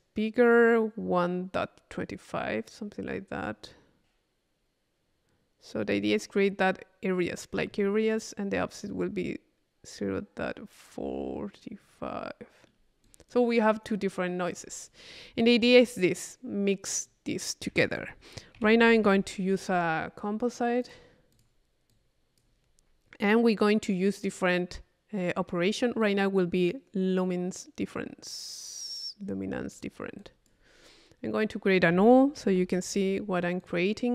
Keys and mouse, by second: 6.3 middle click, 8.7 middle click, 11.9 middle click, 13.0 click, 14.5 click, 15.2 middle click, 15.7 click, 17.0-18.3 drag, 17.7 Tab, 18.5 c, 20.8-23.6 drag, 24.3 click, 26.0-27.3 drag, 29.7-30.8 drag, 31.4-32.5 drag, 32.0 Tab, 32.5 u, 33.6 click.